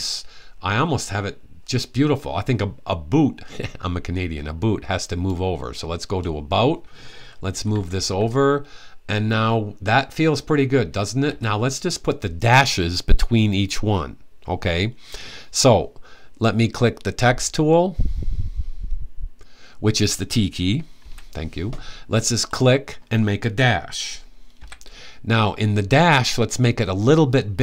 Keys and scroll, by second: 7.1-7.9 typing, 11.0 Right, 20.7 t, 24.3 /.